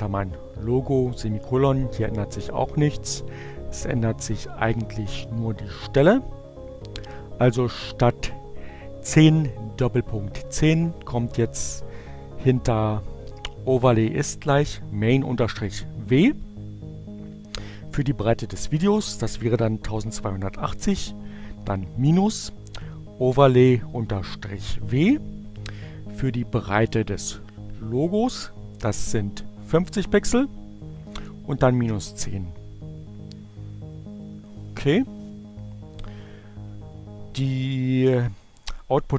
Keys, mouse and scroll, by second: 1.0 BackSpace, 26.6 Right, 36.9 Return.